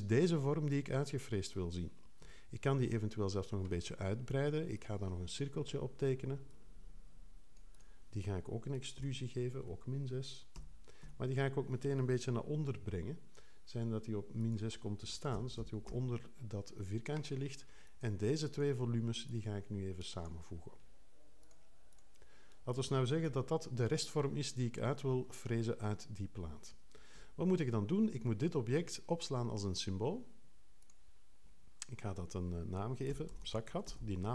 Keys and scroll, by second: 2.2 5, 9.0 super+e, 10.5 Return, 15.1-16.0 typing, 23.2 3, 27.1 5, 33.1-34.3 typing.